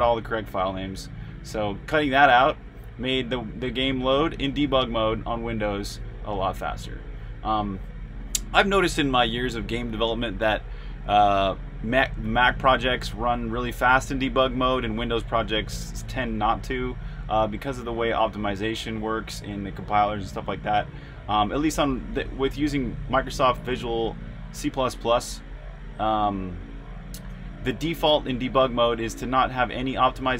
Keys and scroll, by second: 0.0-12.0 typing, 13.2-14.0 typing, 27.7-29.2 typing.